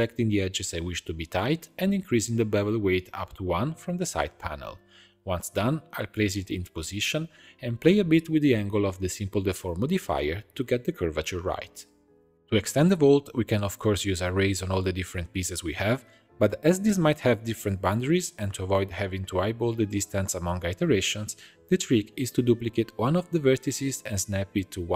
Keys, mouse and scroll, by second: 0.2 2, 0.7 alt+click, 0.9 middle click, 1.1-1.5 scroll up 1, 1.5 alt+shift+click, 2.0 alt+shift+click, 2.7 alt+shift+click, 3.0 shift+middle click, 3.8 alt+shift+click, 4.4 alt+shift+click, 5.4-7.2 drag, 8.9 g, 10.5-12.0 shift+drag, 12.9-18.9 drag, 18.9-19.5 shift+scroll up 1, 19.5 click, 19.7 Tab, 20.2 shift+middle click, 20.6 1, 20.8-21.2 scroll up 1, 21.2-22.8 middle drag, 22.8 click, 23.6 shift+d.